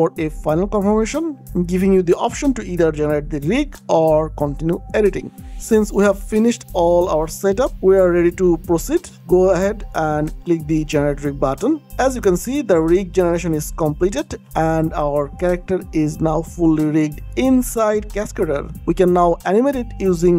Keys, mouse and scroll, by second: 11.5 click, 15.1 click, 16.2 ctrl+click, 18.4 alt+click, 18.7 click, 19.0 click, 20.0 ctrl+click.